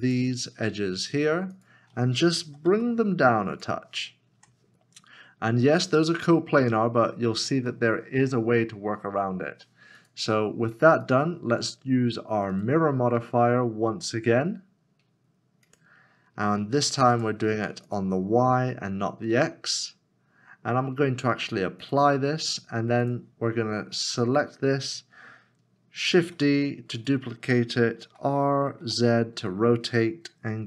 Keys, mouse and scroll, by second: 0.8 2, 1.5 shift+click, 2.4 g, 4.3 y, 4.4 Tab, 5.2-5.6 scroll down 1, 7.7 shift+middle click, 25.1 shift+middle click, 26.2 shift+d, 28.8 r, 30.6 z.